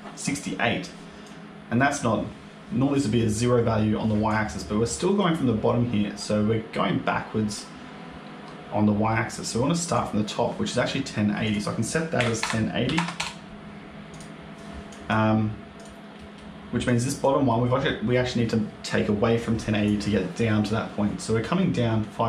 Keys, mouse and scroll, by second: 1.1 click, 4.7 middle click, 9.0 middle click, 9.8 click, 11.3 click, 14.0 click, 14.8 click, 15.6 click, 16.0 middle click, 16.7 click, 17.4 middle click.